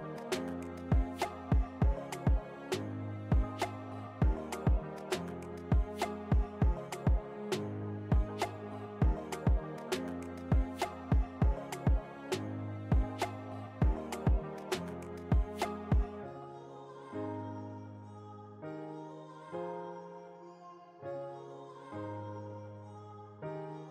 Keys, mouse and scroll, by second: 4.4-11.7 drag, 11.7 alt+scroll up 1, 11.8 space, 11.9 click, 12.2 space, 12.6 click, 13.3 ctrl+t, 14.1 click, 14.7 ctrl+t, 15.4 click, 15.9 ctrl+t, 16.2-18.3 drag, 18.3 click, 19.1-22.7 alt+shift+drag, 22.7 Return, 23.6 click.